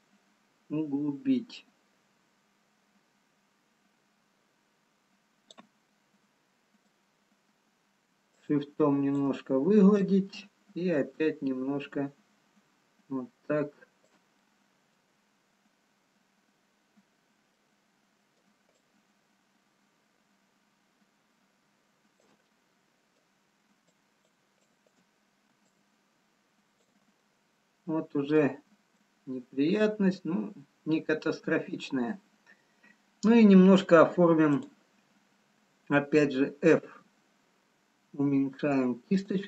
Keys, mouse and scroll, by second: 6.3 middle click, 8.3 shift+click, 11.2 ctrl+click, 14.5 middle click, 15.5-17.1 scroll down 1, 18.8 middle click, 18.8 ctrl+click, 22.6 middle click, 24.3 shift+click, 25.5 shift+click, 28.0 ctrl+click, 28.0 middle click, 30.1 middle click, 34.6 click, 37.1 f.